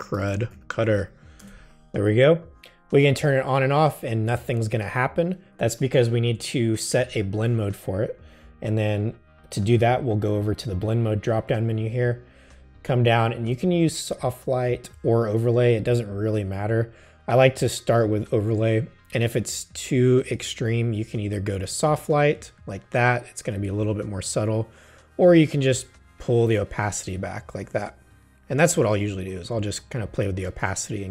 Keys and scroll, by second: 0.0-1.5 typing.